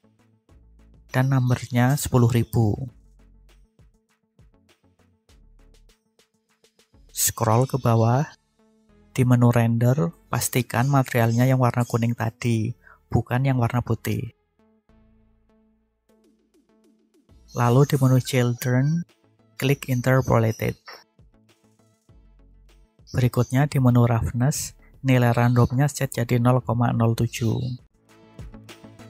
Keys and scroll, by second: 4.2 0, 4.9 Return.